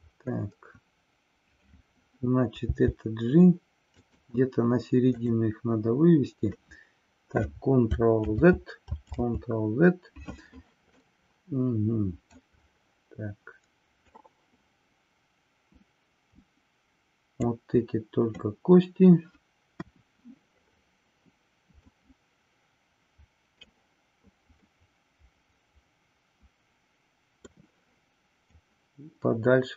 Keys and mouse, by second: 4.1 click, 8.2 ctrl+z, 11.1-12.4 middle drag, 14.2-17.4 drag, 19.7 KP_1, 21.9-23.7 middle drag, 24.7-27.5 middle drag, 28.4-29.7 drag.